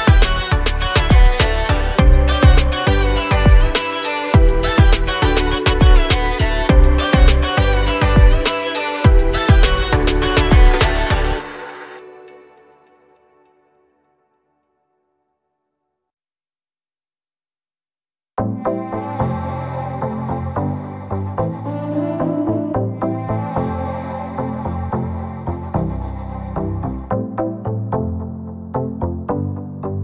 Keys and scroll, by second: 0.7 l, 2.5 space, 3.0 e, 5.7 l, 8.0 space, 8.5 p, 9.5 0, 9.7 Return, 10.6-11.9 typing, 13.1-15.4 typing, 16.4 space, 17.0 Delete, 18.1 p, 20.7 Escape, 26.3 space.